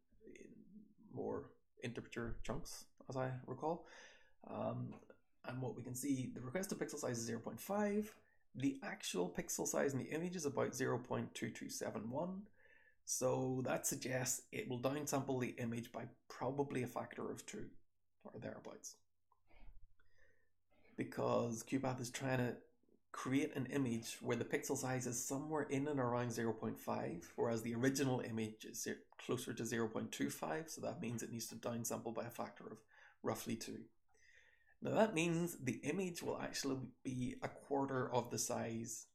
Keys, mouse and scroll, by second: 34.0-35.1 scroll down 1, 35.1-36.1 drag, 35.1-36.1 scroll down 1, 36.1-37.4 scroll down 1, 37.4-39.1 drag, 37.4-39.1 scroll down 1.